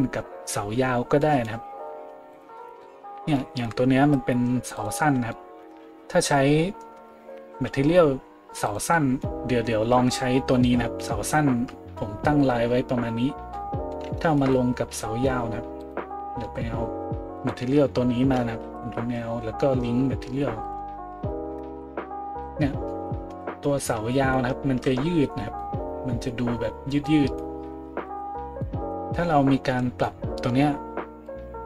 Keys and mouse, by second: 2.3 middle click, 2.3 right click, 4.8 middle click, 4.8 right click, 7.5 a, 8.7 right click, 15.8 middle click, 15.8 right click, 17.4 shift+middle click, 17.4 shift+right click, 18.6 ctrl+l, 21.8 a, 22.4 middle click, 22.4 right click, 23.3 a.